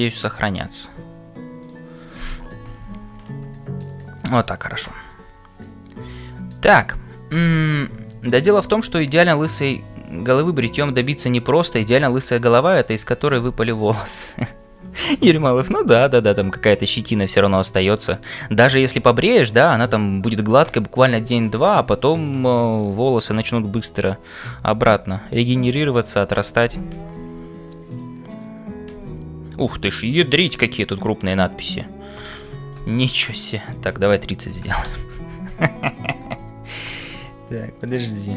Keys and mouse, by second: 3.5 shift+middle click, 4.0 middle click, 4.9 click, 5.7 middle click, 15.3-18.3 shift+middle drag, 22.4 shift+middle click, 24.4-25.5 middle drag, 25.9 click, 29.0 f, 33.7-35.6 drag, 36.1 n, 37.7 click.